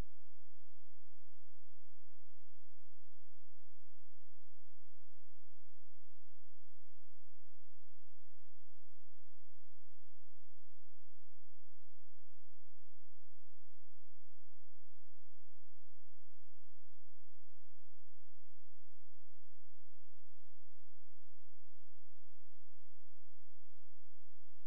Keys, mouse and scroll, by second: 0.3 click, 1.0 shift+click, 4.0 click, 4.5-4.9 scroll down 1, 4.9-5.9 scroll up 1, 5.9 right click, 7.5 click, 15.8 shift+click, 22.8-23.1 scroll down 1, 23.1-23.7 scroll up 1.